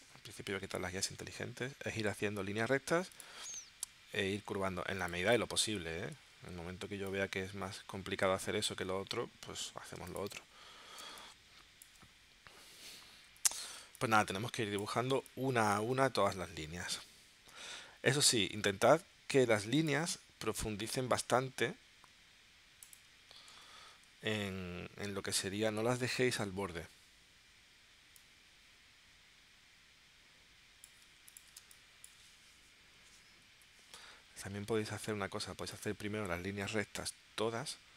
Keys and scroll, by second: 0.5 super+u, 6.1 shift+c, 11.0 space, 13.3 p, 13.8 space, 15.3 space, 23.5 shift+c, 31.6 space, 33.5 p.